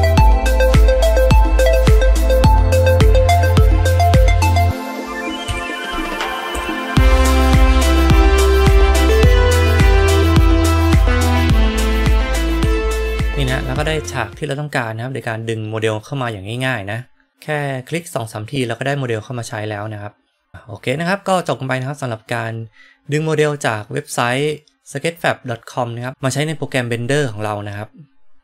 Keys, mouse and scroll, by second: 5.4 KP_1, 6.5 g, 9.3-10.3 middle drag, 12.5 KP_1.